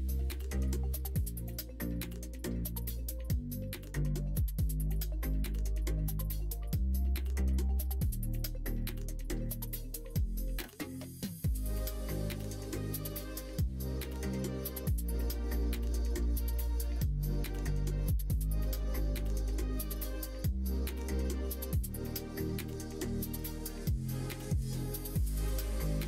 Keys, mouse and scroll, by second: 0.4 middle click, 0.9 n, 1.1 middle click, 1.8 middle click, 2.4 middle click, 3.2 s, 5.6 ctrl+z, 6.3 s, 7.9 ctrl+right click, 8.8 ctrl+z, 9.4 s, 12.1 middle click, 12.7-14.0 middle drag, 15.1-18.1 drag, 18.4 middle click, 19.5 click, 20.0-21.8 drag, 22.6 middle click, 24.0-25.3 drag, 25.6 middle click.